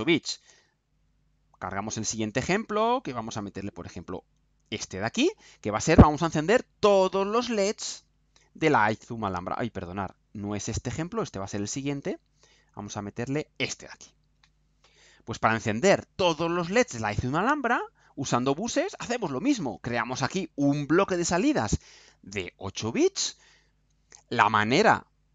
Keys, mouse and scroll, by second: 4.9 click, 7.9 click, 13.3 click, 16.7 click, 17.7-19.9 right drag.